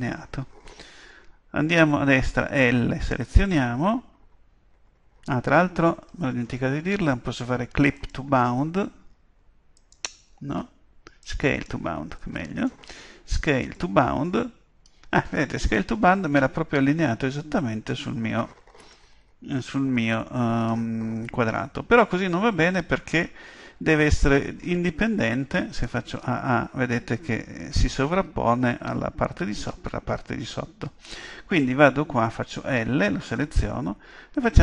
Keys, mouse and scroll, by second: 8.0-15.5 drag, 25.8 a, 26.2 a.